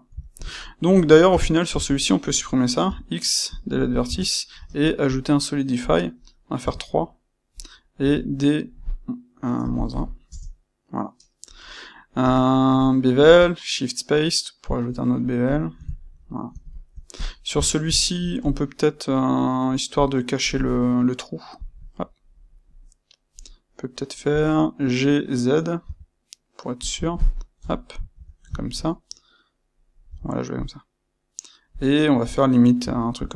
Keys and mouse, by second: 1.2 Tab, 1.8 click, 2.8 x, 4.0 Tab, 4.5 space, 6.9-15.5 middle drag, 15.5 click, 15.8-17.1 ctrl+middle drag, 17.1 click, 17.5 Tab, 17.9 ctrl+middle click, 18.4 click, 19.1-21.5 middle drag, 21.5 click, 21.9-26.8 middle drag, 24.2 g, 26.8 click, 27.6 KP_1, 28.1 Tab, 28.5-31.7 ctrl+middle drag, 30.0 g, 31.7 click, 32.8 e.